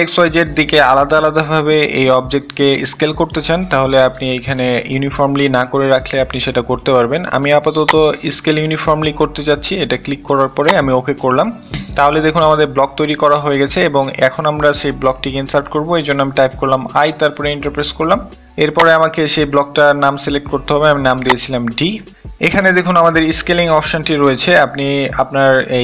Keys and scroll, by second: 16.2 i, 16.5 Return.